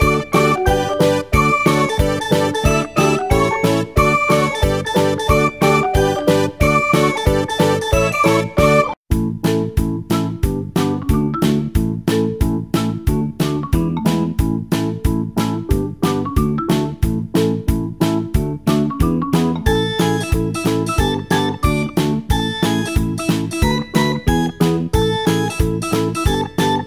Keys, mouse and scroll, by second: 20.5-21.4 drag, 21.4-22.1 scroll down 1, 22.8 click, 26.0 KP_0.